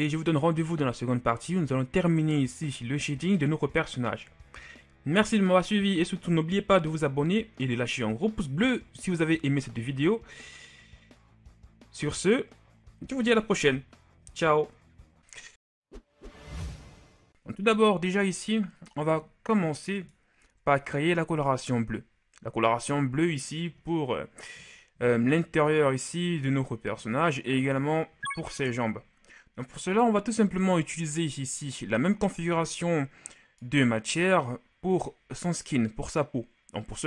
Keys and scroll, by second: 28.4 KP_1.